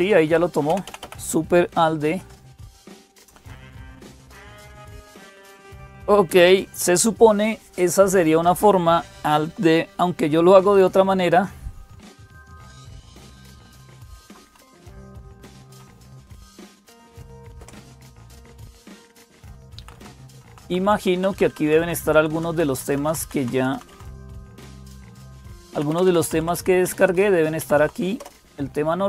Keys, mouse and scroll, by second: 0.0-29.0 typing, 0.0 Up, 0.5 Down, 0.6 Down, 2.0 Down, 14.6 Up, 14.9 Up, 15.5 Down, 17.4 Return, 18.9 Down, 19.0 Down, 19.2 Down, 19.4 Down, 20.6 Down, 20.8 Down, 21.1 Down, 21.3 Down, 21.6 Down, 22.1 Down, 22.3 Down, 22.5 Down, 22.8 Down, 23.0 Down, 23.3 Down, 23.5 Down, 24.8 Up, 24.8 Down, 25.0 Up, 25.2 Up, 25.5 Down, 25.7 Down, 26.6-27.4 Down, 27.6 Up, 28.0 Up.